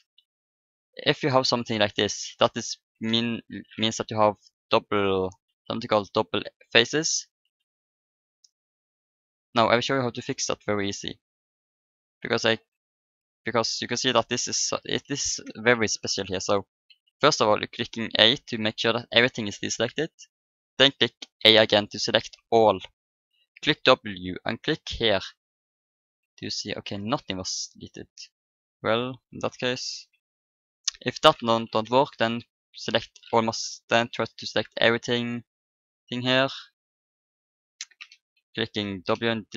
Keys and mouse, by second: 1.0 a, 1.6-3.7 right drag, 4.1 middle click, 5.3 a, 5.8 middle click, 6.8 a, 7.4 a, 9.7 middle click, 10.1 middle click, 11.5-13.3 middle drag, 14.5 r, 16.9 a, 20.3 middle click, 20.3 click, 21.3 a, 23.6 w, 26.4-28.7 middle drag, 27.5 a, 28.5-29.8 drag, 29.9 b, 31.8 Delete, 34.4 c, 37.8 c, 38.3 Delete.